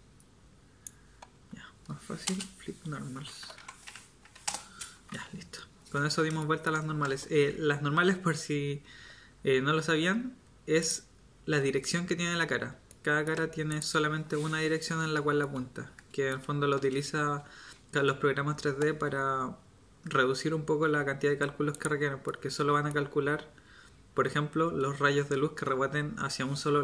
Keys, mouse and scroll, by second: 1.3 Tab, 2.2 space, 4.9 Tab, 9.8 Tab, 15.7 middle click, 22.4-23.5 middle drag.